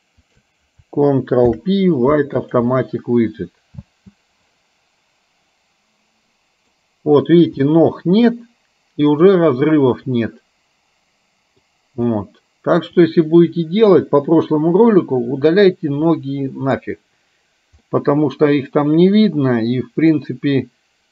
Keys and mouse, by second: 1.5 ctrl+p, 4.0 space, 4.7-7.1 middle drag, 7.8-11.8 middle drag, 12.3 middle click, 16.3 middle click, 18.1-20.2 middle drag.